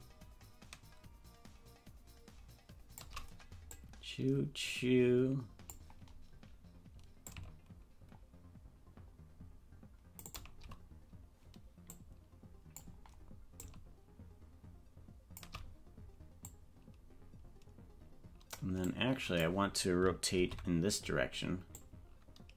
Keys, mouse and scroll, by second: 3.7-5.8 drag, 7.2-10.2 shift+drag, 11.9 click, 13.7-15.4 shift+drag, 16.4-18.6 drag, 19.0 click, 20.4 alt+r, 21.7-22.5 drag.